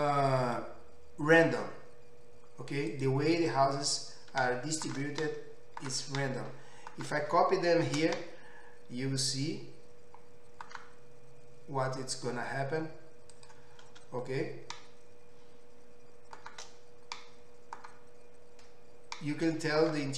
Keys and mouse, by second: 3.1-20.1 middle drag, 9.9 shift+d.